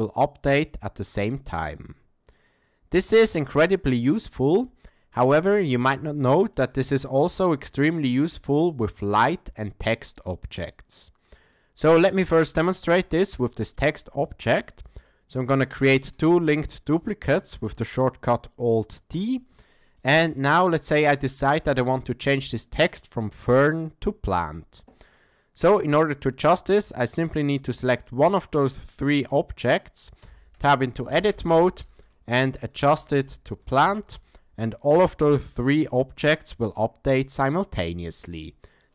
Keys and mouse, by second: 4.4 Tab, 5.3 x, 6.2-6.5 middle drag, 6.7-7.5 shift+middle drag, 7.7 middle click, 9.1 click, 10.7-11.2 middle drag, 11.5-12.1 shift+middle drag, 12.7 shift+middle drag, 14.5 alt+d, 16.3-16.9 shift+middle drag, 19.7-20.0 shift+middle drag, 20.3 middle click, 21.1-21.6 shift+middle drag, 30.2 Tab, 30.9 BackSpace, 31.1 BackSpace, 31.3 BackSpace, 31.5 BackSpace, 32.7-33.9 typing, 34.9 Tab.